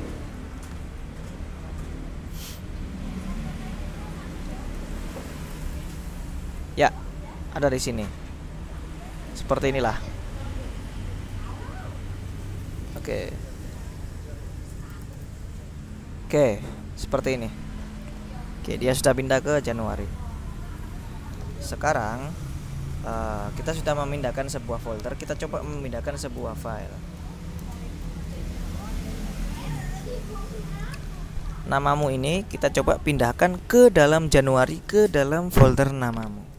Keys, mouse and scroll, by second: 0.4 click, 0.9 scroll down 2, 1.6-2.3 scroll up 2, 3.8-4.4 scroll down 2, 4.9 ctrl+i, 5.3-6.5 typing, 7.7-9.4 drag, 11.1 click, 12.4 click, 14.8 ctrl+i, 15.1 ctrl+a, 17.1 click, 19.6 click, 20.9 click, 22.0 click, 23.7 click, 26.8 c, 27.3 d, 27.7 space, 28.1 ., 28.5 Return, 29.5 ctrl+l, 29.8 ctrl+s, 29.9 Return, 32.3-34.1 drag, 34.4 click.